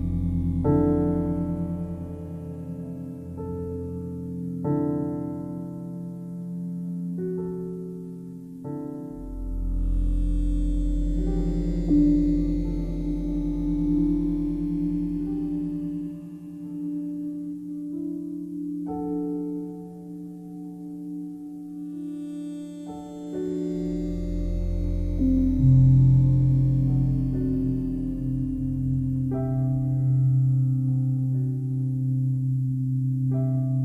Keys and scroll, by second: 16.0 ctrl+t.